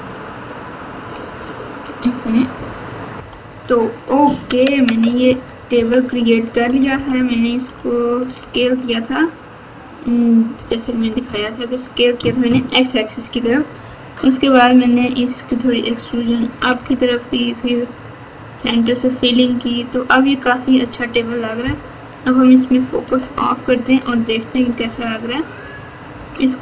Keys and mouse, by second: 0.4 click, 3.2 ctrl+KP_6, 5.7-8.5 typing, 10.5 KP_8, 10.7 KP_8, 10.9 KP_8, 11.1 KP_8, 16.5 KP_2, 16.8 KP_2, 18.5 KP_8, 23.0 KP_Divide, 24.5 KP_4, 24.7 KP_4, 26.1 KP_1.